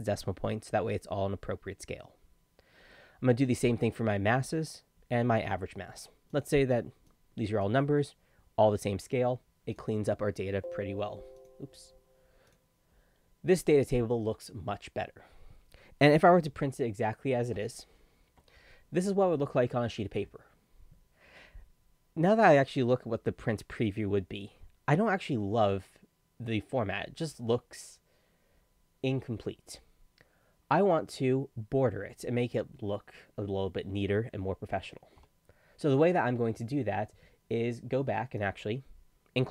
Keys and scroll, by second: 17.6 ctrl+p.